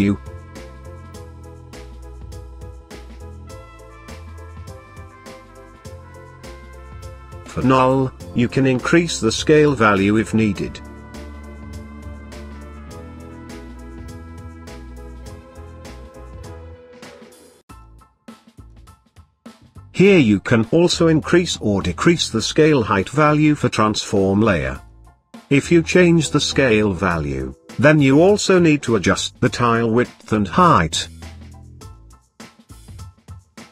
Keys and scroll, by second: 6.8 s, 20.8 u.